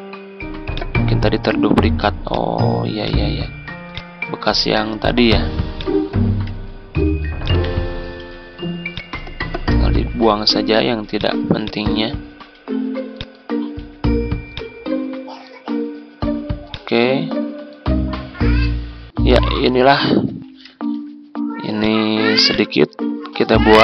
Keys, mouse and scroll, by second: 0.7 click, 1.4 Delete, 2.2 click, 5.2 Delete, 5.7 click, 6.4 Delete, 7.4 click, 7.6 Delete, 8.1 Delete, 8.9-10.5 drag, 12.5 Delete, 13.1 click, 13.7 Delete, 14.5 click, 15.6 Delete, 16.6 click, 18.2 Delete, 19.3 F4, 20.4 click, 21.3 click.